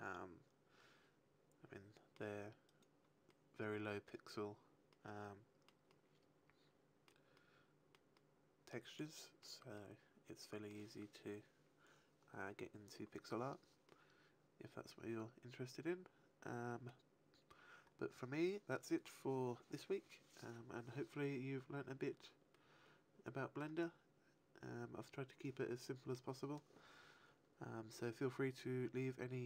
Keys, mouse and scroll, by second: 2.6 right click, 3.2 middle click, 4.8 middle click, 5.9 middle click, 7.3 middle click, 8.1 middle click, 8.9 middle click, 9.7 middle click, 13.8 middle click, 22.5 middle click.